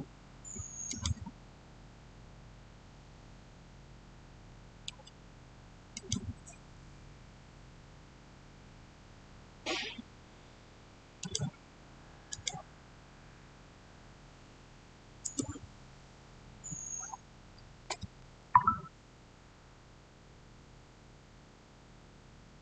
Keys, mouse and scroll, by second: 2.0 scroll down 1, 5.8 click, 9.3 click, 11.0 scroll, 11.0 click, 14.2 6, 15.1 Return, 16.9-18.6 scroll up 1.